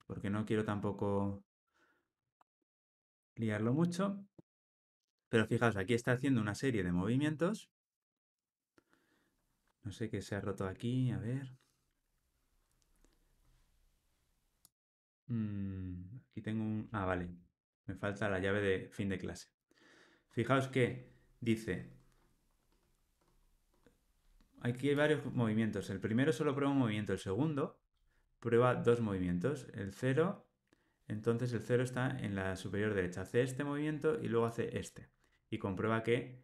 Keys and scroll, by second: 3.1 alt+super+l, 3.7 ctrl+alt+o.